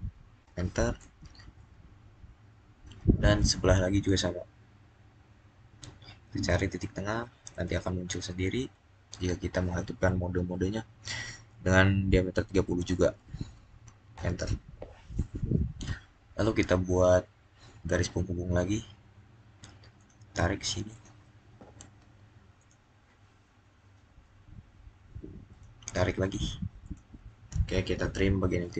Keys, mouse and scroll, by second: 0.3 Return, 0.9 right click, 3.3 click, 7.4 click, 12.2-13.2 typing, 14.0 Return, 17.7 Return, 19.8 click, 25.4 click.